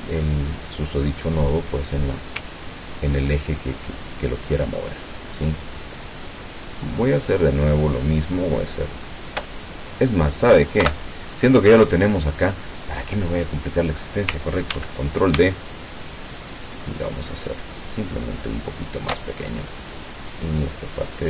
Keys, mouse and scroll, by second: 0.7 click, 1.9 click, 2.5-6.5 ctrl+drag, 6.8 ctrl+click, 10.1 click, 10.9 Delete, 11.9 click, 14.7 ctrl+d, 16.2-19.1 ctrl+shift+drag.